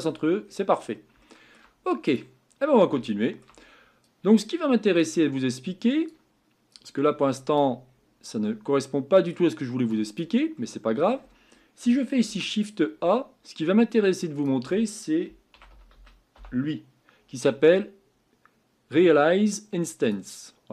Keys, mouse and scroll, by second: 0.0-1.2 scroll down 15, 1.2 shift+middle click, 2.1 click.